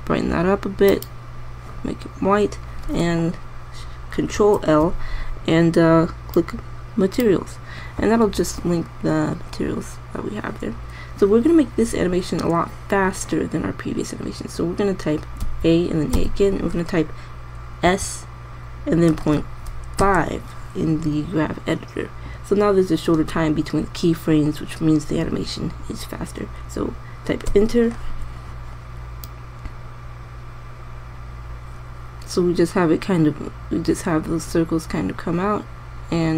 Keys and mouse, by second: 5.2 ctrl+l, 16.2 a, 16.9 a, 18.7 s, 30.2-31.9 drag.